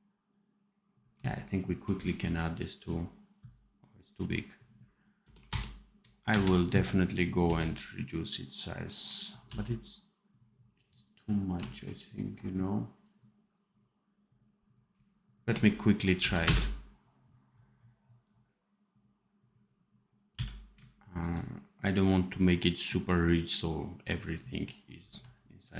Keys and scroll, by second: 7.3 c, 9.4 v, 16.1 Delete, 20.2 n, 25.0 v.